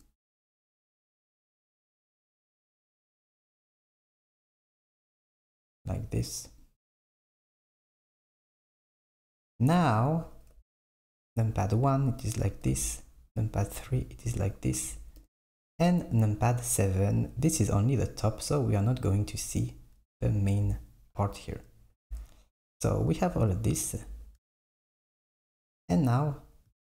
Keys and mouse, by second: 0.5 g, 3.1 click, 3.6 g, 9.4 s, 10.6 KP_1, 12.7 KP_3, 15.2 KP_7, 22.0 KP_1, 24.1 Tab.